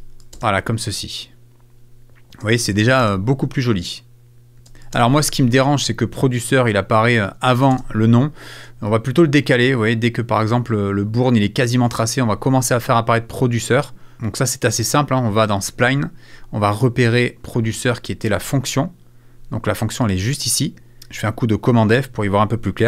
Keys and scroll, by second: 8.6 space, 21.0 super+f.